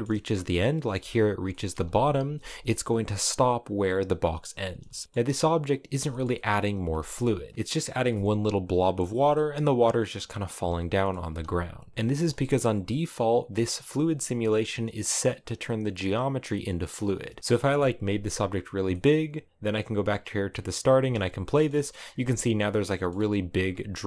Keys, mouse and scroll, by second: 0.1-0.6 scroll up 2, 0.6 space, 1.2 middle click, 2.0 space, 3.9-4.5 scroll down 2, 4.5 shift+middle click, 5.4 click, 5.8 shift+middle click, 5.9 scroll up 1, 6.0 middle click, 6.6 space, 7.3 click, 7.7 space, 8.8 space, 9.1-10.2 middle drag, 10.2 space, 10.6 middle click, 11.0 space, 11.6 click, 12.1 shift+middle click, 12.2-13.1 scroll up 3, 13.4 shift+middle click, 13.8-17.0 scroll down 1, 17.0 right click, 17.7 s, 18.7 middle click, 19.5 click, 20.0 scroll down 1, 20.2 middle click, 20.7 space, 21.2 shift+middle click, 21.8 space, 22.2 middle click, 23.1 click, 23.6 space.